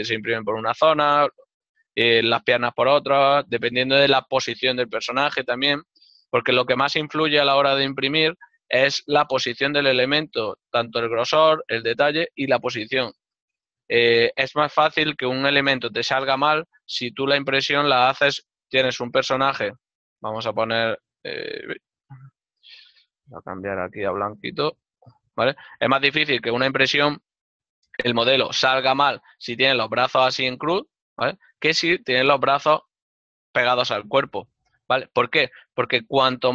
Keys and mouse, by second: 14.0 middle click, 19.1 click, 19.1 d, 20.3 click, 21.7 right click, 21.9 n, 23.5 click, 24.5 click, 26.1 n, 28.6 click, 28.6 d, 29.5 click, 30.2 click, 33.1 click, 34.1 click, 36.4 click, 36.4 d.